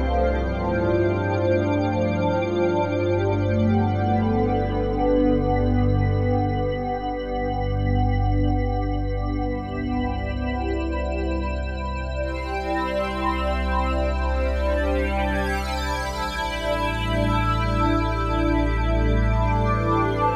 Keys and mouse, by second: 0.5 g, 0.9 z, 2.5 Escape, 3.7 shift+click, 4.5 shift+click, 5.7 shift+click, 6.4 shift+click, 6.4-9.0 typing, 7.3-8.5 shift+drag, 8.9 shift+click, 9.8 ctrl+z, 10.0 ctrl+z, 10.3 alt+shift+click, 10.8 ctrl+alt+click, 11.8 shift+click, 12.6-14.8 shift+drag, 14.8-15.2 typing, 17.8 click.